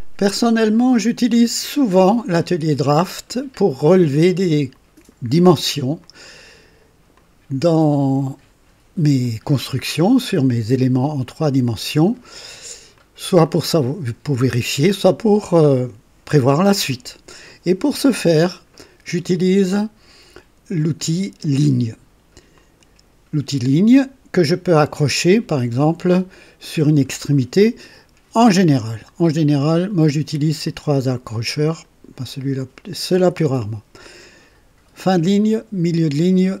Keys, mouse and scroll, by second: 0.9-2.5 drag, 4.1-5.3 drag, 6.0-6.8 drag, 7.1-9.4 drag, 10.2-12.4 drag, 12.9-14.1 drag, 22.5 click, 29.7 click, 30.6 click, 31.7 click.